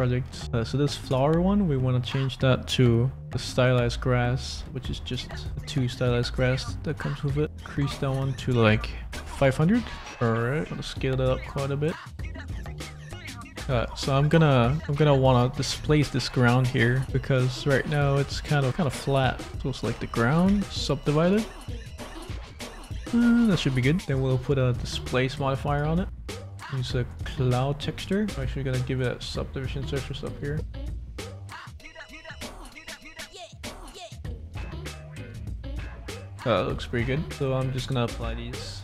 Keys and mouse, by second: 1.1-3.7 drag, 3.2 s, 4.0 click, 4.2-6.1 middle drag, 6.5 click, 7.8-10.0 drag, 9.1 0, 10.6 shift+middle click, 11.8 shift+middle click, 12.6 click, 12.9-14.2 drag, 13.2 middle click, 13.2 right click, 14.5 click, 14.7 click, 15.3 click, 16.3 click, 16.6 right click, 17.5 click, 17.8 middle click, 18.4 click, 18.7 middle click, 19.5 Tab, 19.8 Tab, 20.4 a, 21.0 click, 21.4 click, 21.8 click, 22.2 click, 23.0 click, 23.6 Tab, 23.7 click, 24.2-25.7 drag, 26.2 click, 27.1 click, 28.2 click, 29.9 click, 30.5-31.6 drag, 32.0 click, 32.2-33.5 middle drag, 34.0 middle click, 34.3 middle click, 36.9 click, 37.3 middle click, 38.2 click.